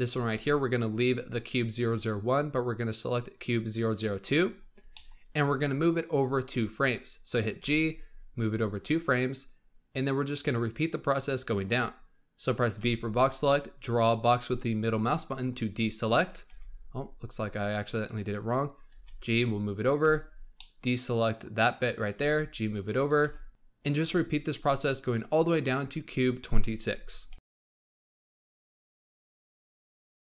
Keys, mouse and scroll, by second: 4.4-7.5 scroll up 9, 4.8 middle click, 7.5 g, 12.7 b, 16.4 b, 18.8 g, 19.9 b, 22.1 g, 23.1 b, 27.2-30.3 typing, 29.2 middle click, 29.5 middle click, 30.0 middle click.